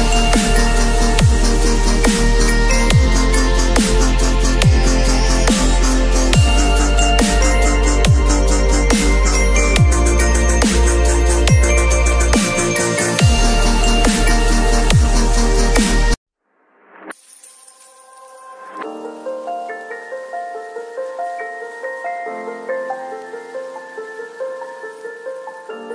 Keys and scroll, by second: 0.0 [, 17.1 v, 18.3 Tab, 18.8 ctrl+l, 22.0 ctrl+l, 25.5 Return.